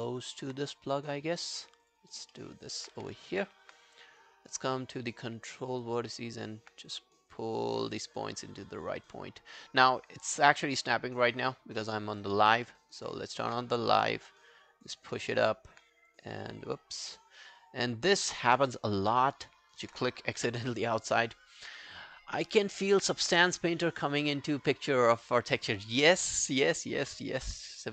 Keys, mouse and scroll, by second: 0.1 alt+middle click, 3.0 w, 3.3 alt+middle click, 4.3 right click, 6.3 alt+right click, 11.4 double click, 11.8 alt+middle click, 12.1 alt+right click, 12.7 alt+middle click, 13.0 alt+right click, 15.3 alt+middle click, 17.6 right click, 19.6 alt+right click, 20.4 f, 27.5 f.